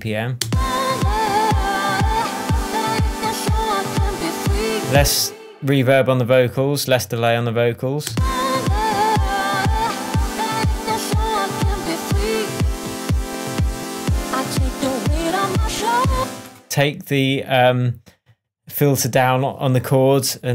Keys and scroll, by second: 0.4 space, 4.9 space, 8.0 space, 16.1 space.